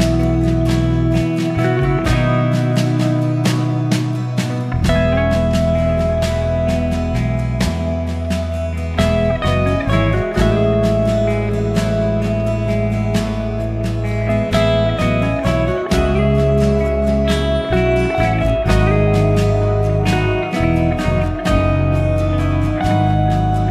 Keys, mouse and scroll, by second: 0.0-0.4 scroll up 6, 0.4-1.2 scroll down 6, 1.2-2.3 drag, 2.8-4.3 scroll up 10, 4.3 click, 4.8 click, 6.1-8.1 drag, 8.9 click, 9.8 click, 11.0 click, 11.9 Tab, 14.3 click, 14.7 a, 15.6 a, 17.2-18.4 scroll down 2, 18.4 u, 20.4 click, 23.5 click.